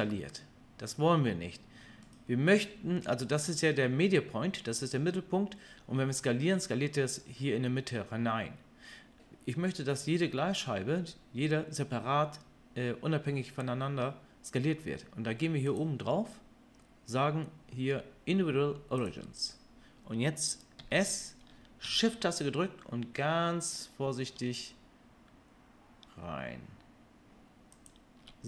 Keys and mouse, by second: 15.8-27.8 drag, 20.8 s, 27.8-28.4 shift+middle drag.